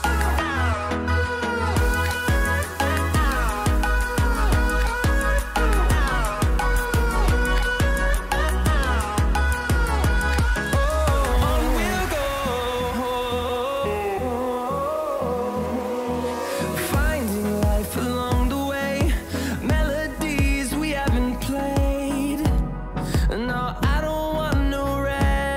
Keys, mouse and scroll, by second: 0.3 scroll up 1, 1.4-8.9 drag, 8.9 scroll down 1, 9.6 scroll up 1, 10.8-16.9 drag, 17.0 click, 17.9 scroll down 1, 19.3-21.2 scroll up 1, 21.8-25.1 drag, 25.1 Delete.